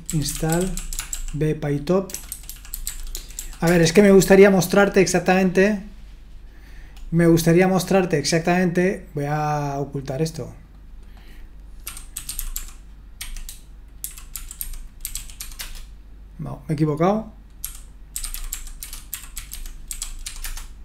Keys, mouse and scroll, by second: 0.0-3.9 typing, 8.4 click, 10.6 click.